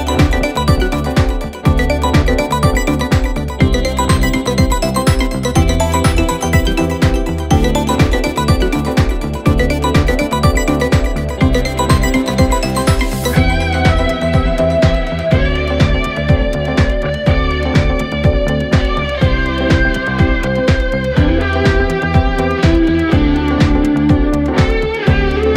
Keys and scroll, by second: 0.0-2.8 typing, 3.3 F9, 4.2 4, 5.2 ctrl+z, 7.3 ctrl+z, 8.9 1, 10.3 ctrl+d, 10.8 F1, 11.2 F1, 11.5 Escape, 12.0 F3, 15.5 F1, 17.7 ctrl+d, 17.8 Escape, 20.5 p, 21.9 4, 22.9 3, 23.9 p, 25.0 p.